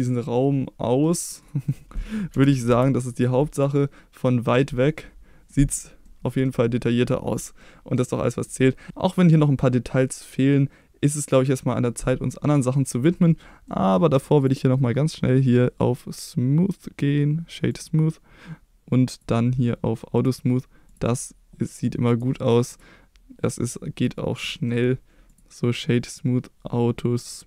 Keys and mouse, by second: 1.4 drag, 1.7 middle drag, 2.3 g, 2.7 x, 3.1 click, 3.5 click, 3.8-4.6 middle drag, 5.5-6.5 middle drag, 7.6-8.0 middle drag, 8.3 middle drag, 9.1 middle drag, 13.7 middle drag, 14.4 click, 15.8-17.8 right drag, 19.1 click, 20.2 click, 20.9 click, 22.1 right click, 24.0 click, 24.5 middle drag, 25.3 click, 27.3-27.4 right drag.